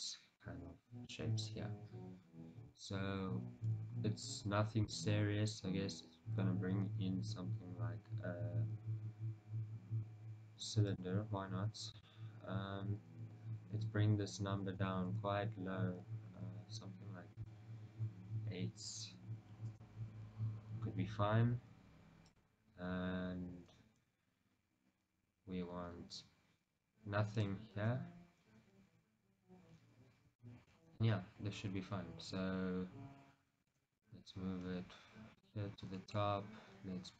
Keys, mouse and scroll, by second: 1.4-4.7 scroll up 2, 4.7-5.0 scroll up 1, 5.0 shift+a, 12.1-17.5 drag, 15.5 Return, 22.4 click, 29.4-30.6 scroll down 2, 30.6-35.6 shift+middle drag, 33.8 g, 36.1-37.1 shift+middle drag.